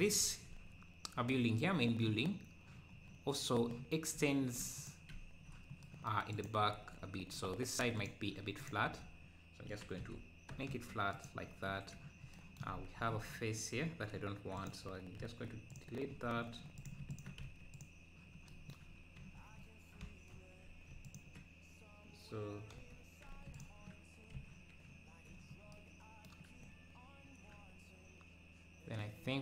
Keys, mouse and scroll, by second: 2.9 scroll down 2, 4.1 `, 4.8 click, 5.1 `, 6.3 click, 6.7 Tab, 8.0-9.7 drag, 9.7 s, 12.7 scroll up 1, 13.0 z, 15.2 x, 16.1 z, 16.4-16.8 scroll down 1, 16.8 click, 17.4 x, 18.9 scroll down 2, 21.0-22.7 alt+drag, 22.7 2, 23.6 alt+click, 24.4 f.